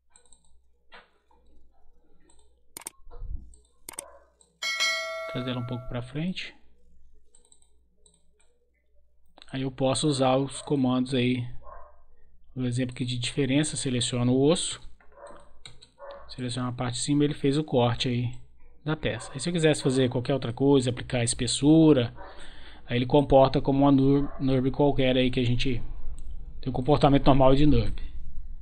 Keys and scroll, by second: 14.6 Return.